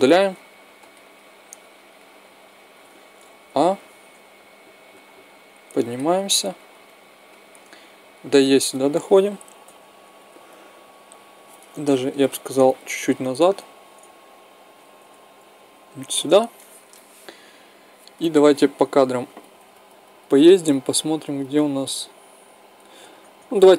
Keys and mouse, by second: 0.1 x, 1.0 middle click, 3.2 a, 3.8 a, 4.6-5.7 drag, 6.3-7.4 drag, 7.9 click, 9.3 Right, 10.0 Left, 12.7 g, 18.5 Left, 22.7 Right.